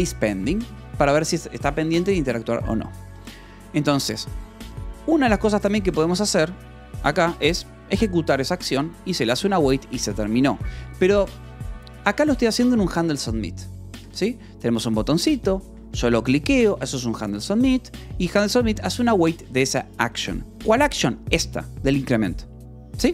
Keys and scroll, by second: 0.0-0.1 typing, 3.1 Escape, 5.0 j, 5.6 k, 6.2 j, 7.4 shift+v, 10.1 Escape, 10.2 k, 10.6 j, 11.7 k, 12.9 shift+v, 13.9 Escape, 14.2 h, 15.2-17.5 typing, 15.7 Escape, 17.4 Escape, 19.2 shift+v, 20.0 Escape, 20.2 k, 21.9 shift+v.